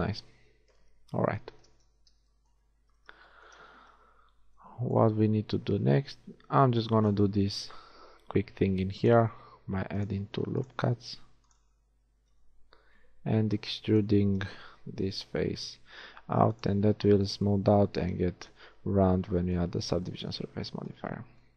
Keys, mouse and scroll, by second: 0.8 KP_1, 2.0 Tab, 3.0 z, 6.4 a, 8.1 ctrl+r, 10.3 ctrl+r, 12.2 a, 13.1 b, 15.0 e, 16.9 a, 17.6 middle click.